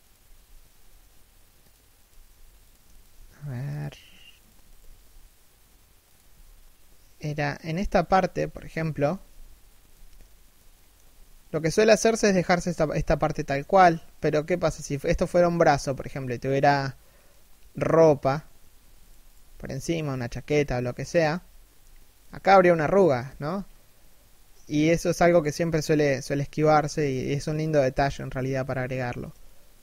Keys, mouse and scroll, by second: 1.6 right click, 2.6 shift+right click, 2.7 g, 4.1 right click, 4.3 shift+right click, 4.5 g, 5.9 a, 8.0 z, 9.3 scroll down 1, 9.6 z, 10.4 shift+middle click, 10.8-12.0 scroll up 1, 14.2 z, 15.6 z, 18.6 shift+right click, 19.1 g, 20.9 a, 21.3-21.9 scroll up 1, 21.9 z, 22.9 z, 23.2-24.1 scroll down 1, 24.1 scroll up 1, 24.1 z, 29.0 shift+middle click.